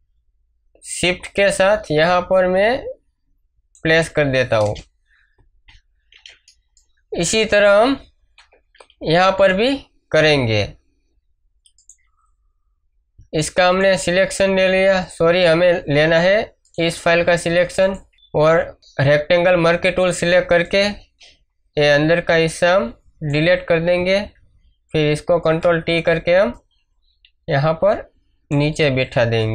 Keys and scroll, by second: 4.6 Return, 8.3 v, 18.1 m, 25.2 ctrl+t, 28.9 space.